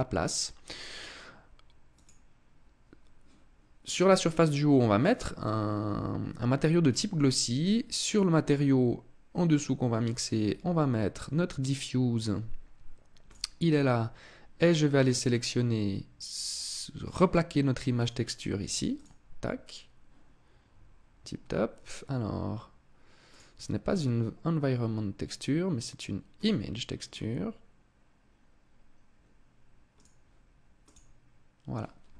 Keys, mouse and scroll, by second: 0.6 click, 7.7 click, 14.2 click, 17.6 click, 22.9 click, 29.6 click.